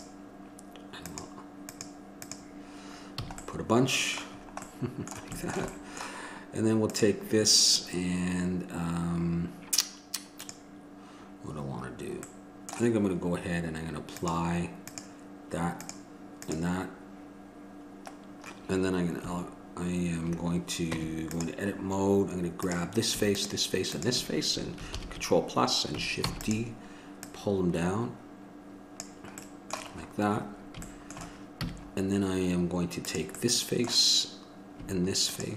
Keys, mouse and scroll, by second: 3.4 a, 3.7-7.1 middle drag, 7.1-8.2 drag, 12.6-15.2 middle drag, 15.2-18.5 drag, 18.5-21.2 middle drag, 21.2 Tab, 22.0 middle click, 22.8-24.5 drag, 25.2 ctrl+l, 26.5 shift+d, 29.7 click, 31.8 a, 33.2-35.5 right drag.